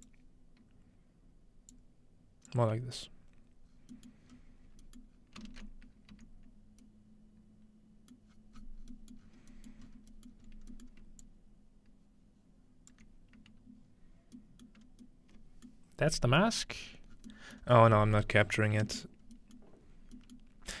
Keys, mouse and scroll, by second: 0.0 click, 1.7 click, 2.6-3.0 scroll down 2, 3.7-4.1 scroll down 1, 4.1 middle click, 4.3 scroll up 2, 5.0-6.7 middle drag, 5.1 scroll down 2, 6.1-6.7 scroll down 1, 6.1 z, 8.3-9.3 middle drag, 8.3-9.2 scroll down 1, 9.2 scroll up 1, 9.8-10.5 scroll up 3, 11.2-13.1 alt+drag, 14.8-15.7 scroll up 2, 14.9 middle click, 15.7-16.5 scroll up 1, 15.7-17.1 middle drag, 16.8-17.6 scroll down 2, 17.6 scroll up 3, 18.4-19.8 scroll up 4, 19.8-20.8 scroll down 2.